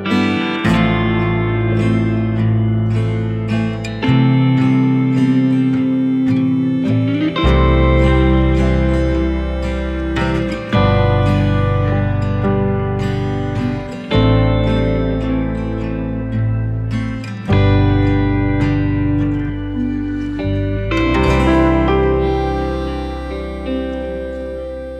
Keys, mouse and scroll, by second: 0.3 scroll up 1, 2.8 scroll up 1, 2.9 right click, 3.7-4.1 scroll up 1, 4.1-4.6 scroll down 1, 4.6 click, 13.0-13.5 scroll down 1, 14.2 click, 15.1 scroll up 1, 16.7 click, 20.1 right click, 20.6 scroll down 1, 21.0-21.4 scroll up 1, 21.4 click, 21.8 scroll up 1, 22.7 click.